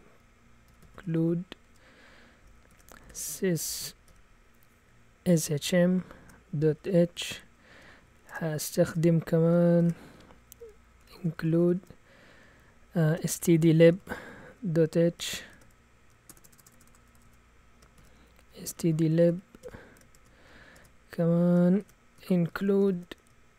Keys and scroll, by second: 0.0-23.5 typing.